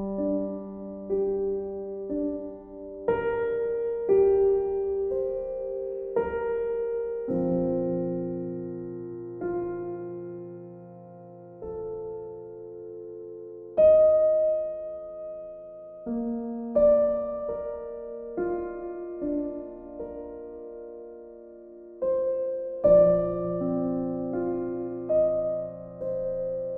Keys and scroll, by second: 5.0-7.2 typing, 26.5 b.